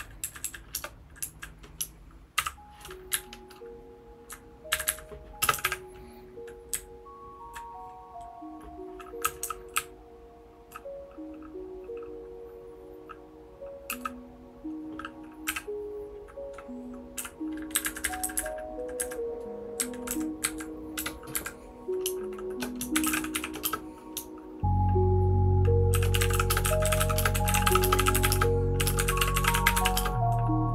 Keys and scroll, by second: 0.2 Down, 0.4 Down, 0.8 Return, 1.2 Down, 2.3 shift+g, 3.1 Up, 3.6-4.2 Up, 4.7 Up, 4.8 Up, 5.4 space, 5.5 e, 5.6 e, 6.7 Down, 7.2 Down, 9.0-10.7 typing, 15.5 o, 17.7 Up, 17.8 Left, 18.0 Left, 18.2 Left, 18.3 Left, 19.0 Left, 19.8 Right, 20.1 Down, 20.4 Right, 20.9 Home, 21.3 Right, 22.7-23.8 typing, 25.7-30.3 typing.